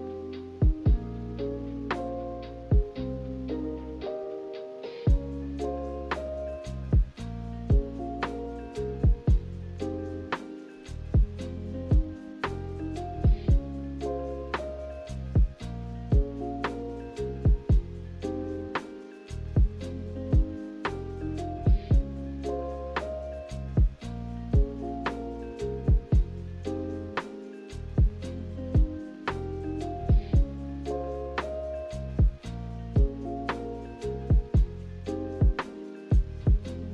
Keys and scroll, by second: 19.2 g, 20.8 z.